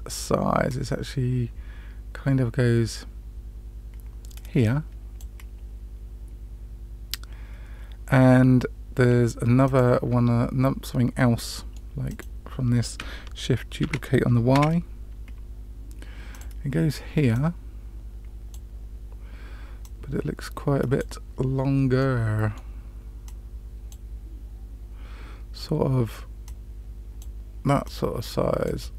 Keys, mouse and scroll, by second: 0.6-5.1 drag, 9.6 click, 11.3-11.7 middle drag, 12.0 click, 13.8 shift+d, 17.2-18.5 drag, 19.7-21.0 drag, 21.9-22.6 middle drag, 23.2-23.9 drag, 26.4 click, 27.8-28.6 drag.